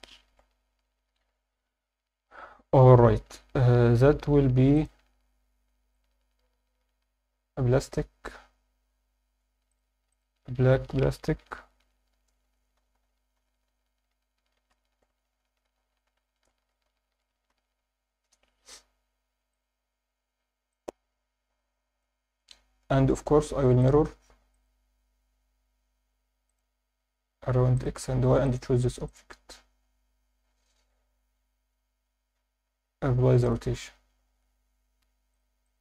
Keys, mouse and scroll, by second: 0.3 alt+a, 0.6-2.8 scroll down 6, 3.1-3.7 scroll up 3, 4.7 click, 4.7 scroll up 1, 5.9 click, 9.7 click, 10.1-18.3 drag, 19.5-22.3 drag, 22.3-23.8 scroll down 3, 23.8 click, 23.8 scroll down 1, 24.5-26.6 drag, 27.8-28.6 drag, 32.6 scroll up 1, 32.6 ctrl+a, 35.3-35.7 drag.